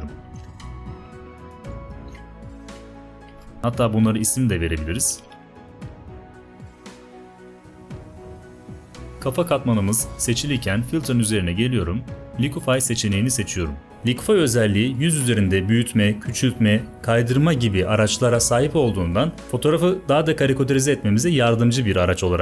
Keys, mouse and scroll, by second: 0.2 ctrl+t, 0.8-2.0 alt+shift+drag, 3.1 Return, 5.2-8.5 typing, 6.4 Tab.